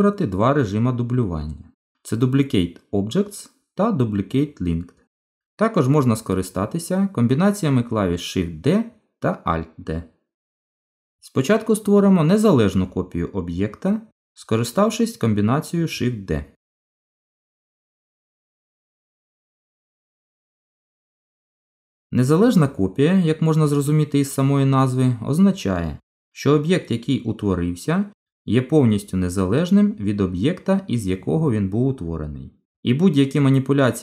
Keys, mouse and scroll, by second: 14.3 click, 16.7 click, 18.9 shift+d, 21.5 scroll down 2, 21.9 middle click.